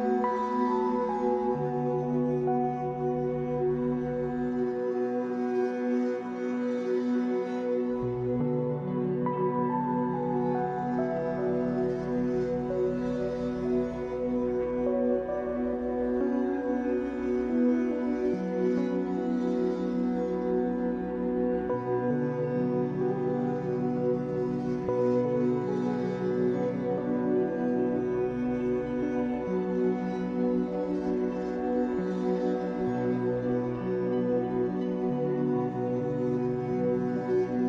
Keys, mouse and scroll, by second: 0.7 f, 1.5-4.9 drag, 4.3 f, 5.0-11.8 drag, 11.5-11.8 scroll down 2, 11.8-19.7 shift+middle drag, 12.3 scroll up 2, 13.2-13.7 scroll up 2, 13.7-14.4 scroll down 4, 19.7 click, 20.2-21.7 middle drag, 21.7 ctrl+shift+s, 23.6 ctrl+shift+s, 24.3-25.9 middle drag, 24.5-24.8 scroll up 2, 25.9-31.9 drag, 31.9-33.4 middle drag, 32.4-33.2 scroll up 2, 33.2 scroll up 1, 33.4-37.6 drag.